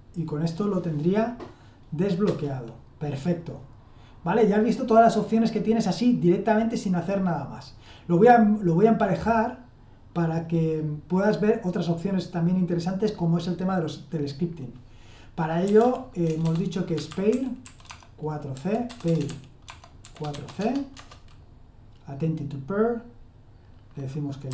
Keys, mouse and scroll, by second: 2.3 Return, 15.4-20.8 typing, 20.9 Return, 24.2-24.5 typing.